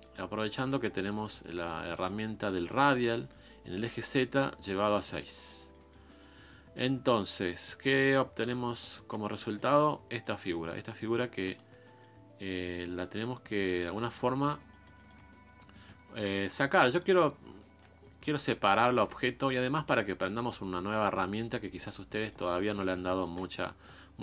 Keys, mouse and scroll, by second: 0.0 click, 0.6 middle click, 1.1-2.8 drag, 2.8 middle click, 3.6-5.1 drag, 5.1 scroll down 1, 5.2-6.3 middle drag, 6.3-6.9 scroll up 3, 6.9 scroll up 2, 7.1-9.0 middle drag, 9.0 scroll down 3, 9.3 shift+middle click, 9.8 scroll up 2, 10.1 middle click, 10.6-11.8 ctrl+drag, 11.8-13.0 middle drag, 13.0 ctrl+click, 13.8 middle click, 14.1 scroll down 4, 14.4 middle click, 15.2-16.0 scroll up 5, 16.0-17.9 ctrl+drag, 17.9-18.3 scroll down 1, 18.3 ctrl+click, 19.1 scroll down 1, 19.4 middle click, 20.2 scroll up 1, 20.4 scroll down 2, 20.6 shift+middle click, 21.2 scroll down 1, 21.4 middle click, 22.2 scroll up 1, 22.3 middle click, 22.8-23.2 scroll up 2, 23.2 shift+middle click, 23.5 scroll down 2.